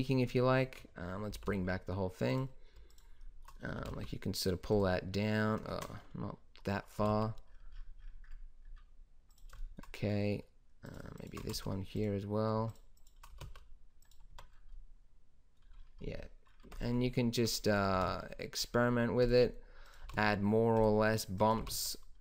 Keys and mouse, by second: 1.2 alt+h, 3.7 g, 5.6 ctrl+z, 6.9 g, 10.8 click, 11.4 g, 13.2 g, 14.2 Tab, 16.6 Tab, 17.4 click, 17.8 g, 20.0 g, 21.5 g.